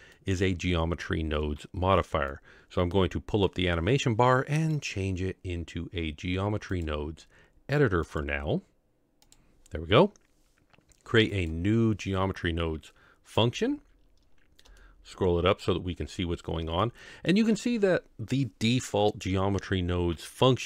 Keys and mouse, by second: 2.6 click, 4.8 click, 6.7-7.4 drag, 8.2-9.3 drag, 14.8 shift+middle click, 17.0 shift+middle click.